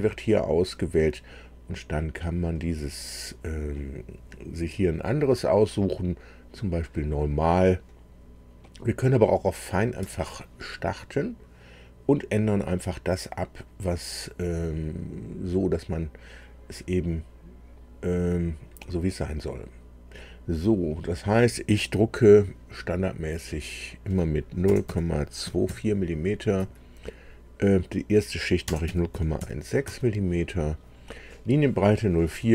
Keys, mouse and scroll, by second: 0.0 click, 2.4-3.2 scroll up 2, 3.6-4.4 scroll up 2, 9.9 Escape, 14.1 click, 19.2 click, 20.8 click, 23.4 click, 24.6 KP_0, 24.8 KP_Decimal, 25.4 KP_2, 25.6 KP_4, 26.5 Tab, 28.6 KP_0, 28.8 KP_Decimal, 29.1 KP_1, 29.4 KP_6, 29.8 Tab, 32.2 Tab.